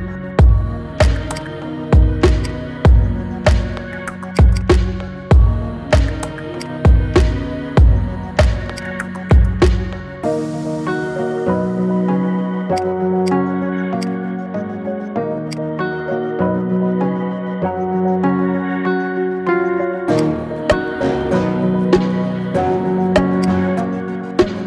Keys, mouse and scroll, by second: 0.4 a, 0.7 s, 1.4 click, 1.7 s, 3.2 s, 4.6 click, 4.7 scroll down 3, 5.0-6.6 middle drag, 6.6 click, 6.9-7.3 middle drag, 7.3 scroll down 3, 7.6-8.7 shift+middle drag, 8.7 click, 9.1-10.0 middle drag, 10.0 KP_7, 10.3-10.7 scroll up 2, 10.7 shift+middle click, 11.5 Tab, 11.7-12.8 scroll up 3, 12.8-14.1 drag, 14.8 shift+s, 16.6 Tab, 16.8-17.8 middle drag, 17.8-18.2 scroll down 2, 18.2 shift+a, 24.1 KP_1.